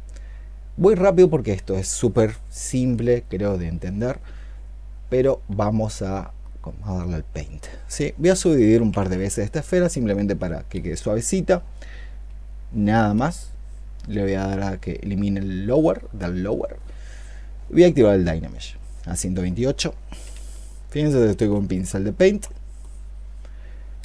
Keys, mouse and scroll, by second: 8.6 ctrl+d, 8.8 ctrl+d, 20.2-20.7 ', 21.1 ', 21.4-22.2 '.